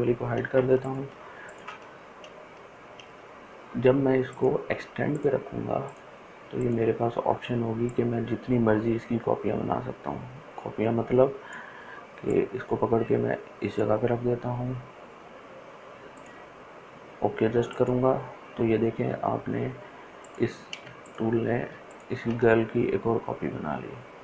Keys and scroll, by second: 20.8 ctrl+space, 21.5 ctrl+space, 21.9 ctrl+space.